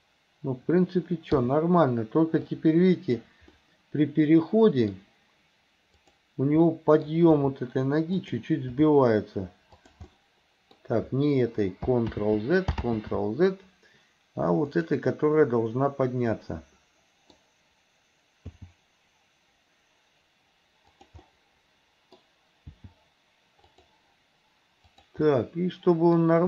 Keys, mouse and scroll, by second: 1.4 i, 2.6 click, 3.6-5.0 middle drag, 6.0 click, 6.7 middle click, 7.3 r, 8.8 g, 10.1-11.0 middle drag, 12.2 ctrl+z, 12.9 ctrl+z, 14.7 click, 15.5-17.4 middle drag, 18.5 g, 21.3 scroll up 1, 21.4 middle click, 22.8 g, 24.9 click, 25.3 middle click.